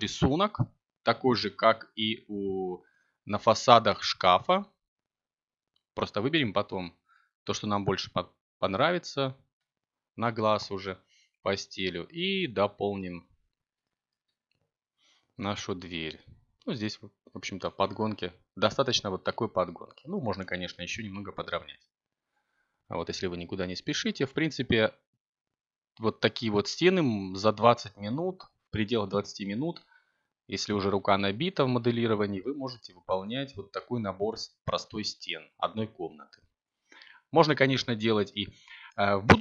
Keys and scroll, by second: 3.6 a, 8.0 b, 11.6 g, 11.9 y, 15.1 g, 16.6 y, 35.6 a, 38.9 7.